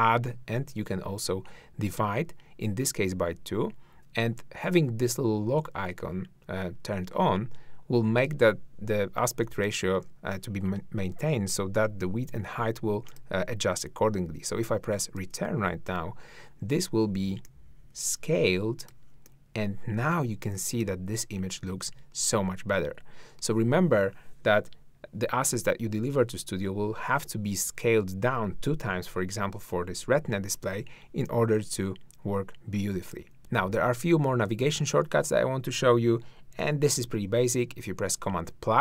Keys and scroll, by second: 15.2 Return, 33.4 shift+`, 37.0 super+=.